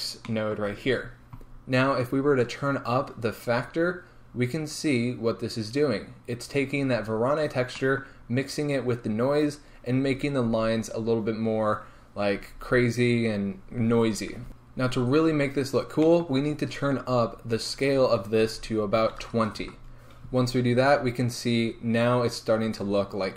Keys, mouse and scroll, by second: 2.7-23.3 drag, 19.8 Return, 20.9-21.3 scroll up 2, 22.6-23.3 scroll down 2.